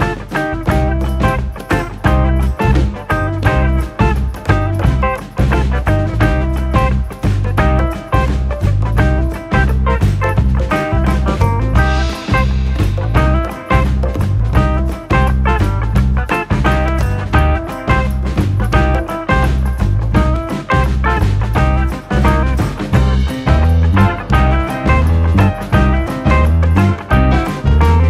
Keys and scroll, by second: 4.4-5.8 scroll, 13.4 u, 14.7 ctrl+=, 20.7 ctrl+-.